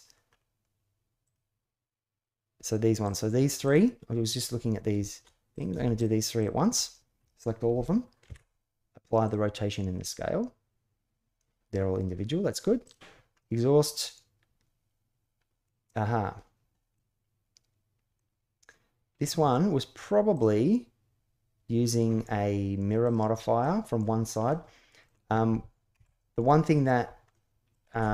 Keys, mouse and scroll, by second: 1.0 click, 2.8 click, 6.1 shift+click, 8.0 ctrl+a, 12.6 click, 13.1-15.4 middle drag, 15.7-16.7 middle drag, 17.9-19.0 middle drag, 22.8 click, 23.4-23.8 middle drag, 24.2-24.8 middle drag, 25.7 KP_1, 27.1-27.5 shift+middle drag.